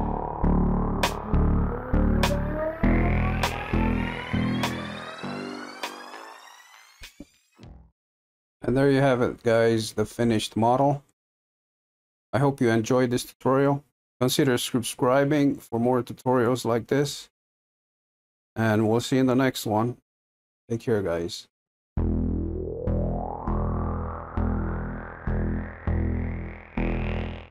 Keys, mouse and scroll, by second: 0.0 click, 0.8-1.9 middle drag, 1.9-2.4 scroll down 5, 2.4-3.0 scroll up 3, 3.0-27.5 middle drag.